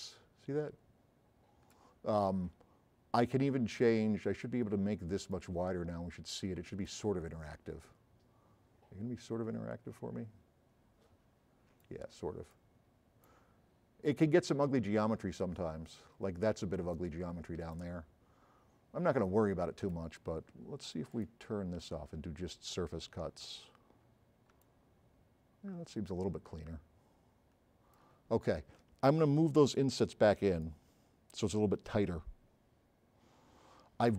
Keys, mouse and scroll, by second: 0.1-1.9 right drag, 5.4 click, 11.9-12.7 right drag, 11.9 s, 12.9 middle click, 13.3 right click, 17.7 s, 21.2 click, 24.6 s, 24.7-25.2 right drag, 29.2-30.6 drag.